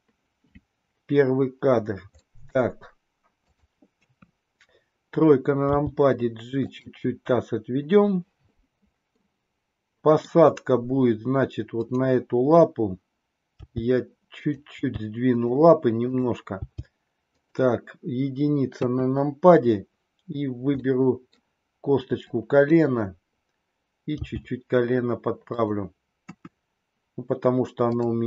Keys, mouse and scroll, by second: 2.2-2.5 middle drag, 3.4 click, 4.1 KP_3, 5.7 g, 9.1-10.2 middle drag, 11.7 click, 13.4 g, 14.8 g, 16.0 click, 16.8 g, 18.7 KP_1, 20.7-21.6 middle drag, 20.7 scroll up 1, 21.4 scroll down 1, 22.2 click, 24.2 g, 26.2 KP_1.